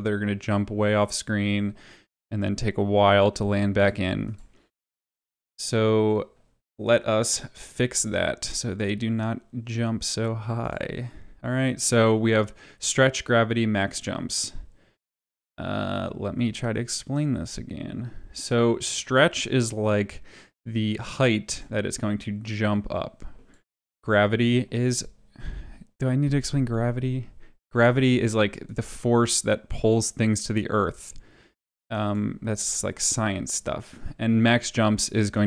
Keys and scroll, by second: 23.7 ctrl+z.